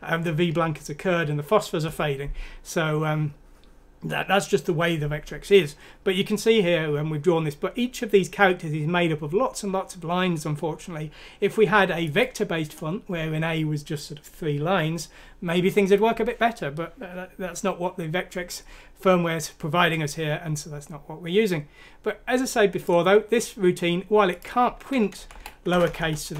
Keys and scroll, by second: 25.1 Right, 25.3 Right, 26.0-26.3 typing.